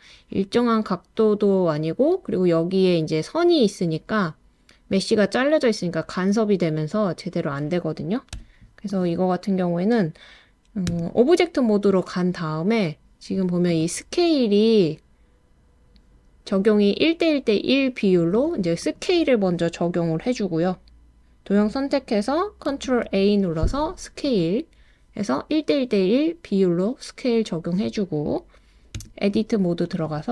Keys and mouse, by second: 8.4 Escape, 10.9 Tab, 22.9 super+a, 28.9 Tab.